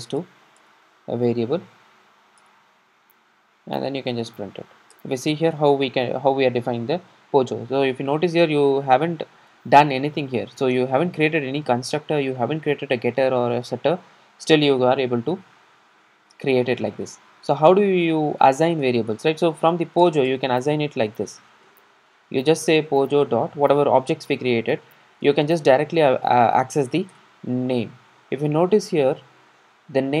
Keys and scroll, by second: 0.1 alt+Return, 2.6 alt+Return, 20.1 Return, 27.2 Return.